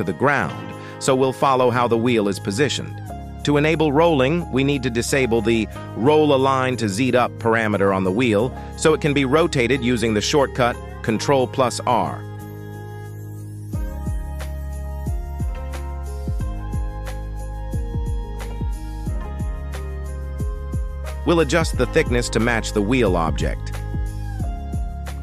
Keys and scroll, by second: 4.0 r, 4.3 Escape, 11.8 ctrl+r.